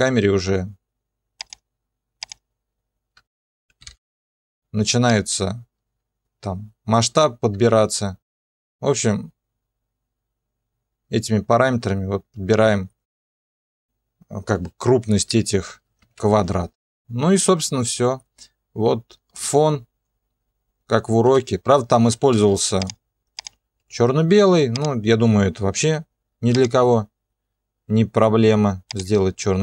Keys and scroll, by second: 5.1 alt+/, 16.0 0, 21.2 0, 22.3 space.